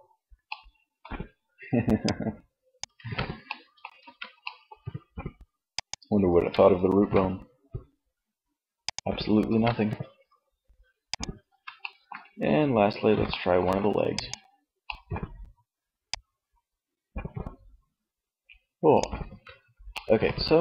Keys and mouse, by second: 1.9 ctrl+z, 2.9 ctrl+z, 5.5-6.5 drag, 6.1 g, 8.7 ctrl+z, 10.5 middle click, 13.3 middle click, 15.3-16.8 drag, 18.3 ctrl+z, 19.9 middle click.